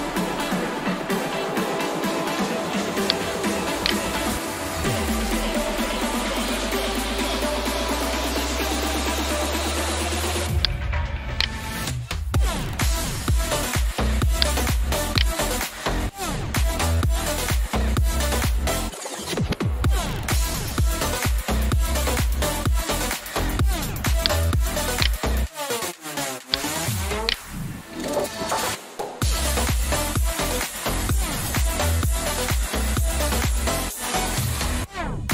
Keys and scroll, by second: 4.5-7.5 typing, 8.4 Return, 15.9-17.2 typing, 18.5 Return, 29.3 shift+m, 30.1 e, 31.8 Return.